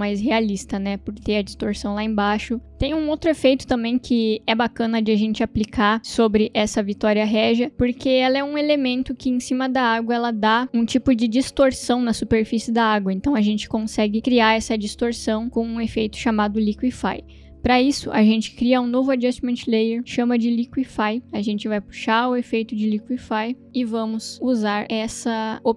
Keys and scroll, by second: 19.1 ctrl+alt+y, 19.8 Return, 20.7 shift+l, 21.2 Return, 22.1 space, 22.9 l, 23.2 q.